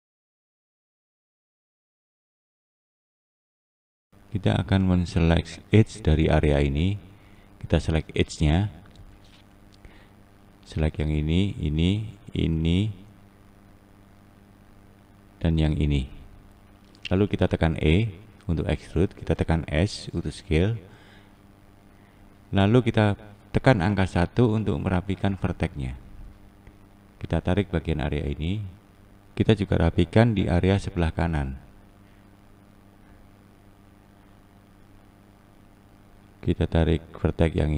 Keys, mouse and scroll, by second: 0.1 click, 0.6 click, 1.6-6.0 scroll down 1, 6.0 click, 8.5 2, 9.4 click, 11.3 shift+click, 12.4 shift+click, 13.2 shift+click, 14.0 shift+click, 14.9 shift+click, 15.8 shift+click, 17.3 e, 19.5 s, 22.4-24.8 scroll up 2, 24.8 1, 25.7 click, 27.4 click, 30.5-31.3 scroll down 1, 31.3 click, 32.4 click, 36.8 click, 37.3 click.